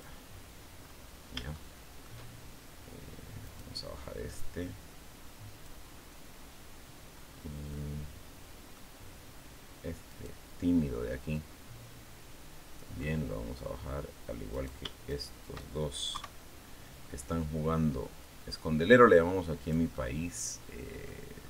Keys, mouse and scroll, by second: 0.6-1.7 scroll up 5, 1.3 shift+middle click, 3.2 right click, 4.2-5.6 drag, 5.6-6.1 scroll down 2, 6.9-7.3 scroll up 2, 7.5-8.7 middle drag, 9.9 right click, 11.1-12.8 drag, 12.8 middle click, 14.3 right click, 14.9 shift+right click, 15.9 KP_3, 18.0-19.7 drag, 19.7-21.1 middle drag, 21.2-21.4 scroll up 2.